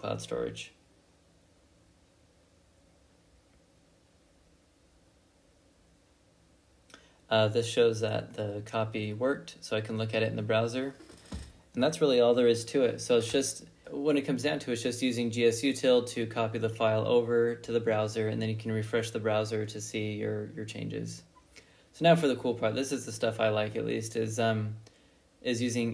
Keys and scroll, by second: 3.9-6.1 typing, 6.7 Return.